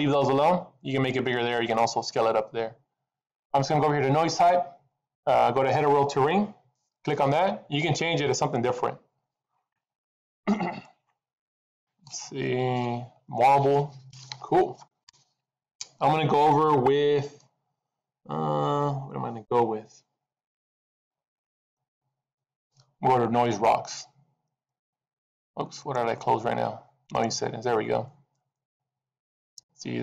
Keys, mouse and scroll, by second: 6.8 click, 11.0 click, 12.8 click, 21.9 click, 24.6 click, 25.6 click, 27.3 click.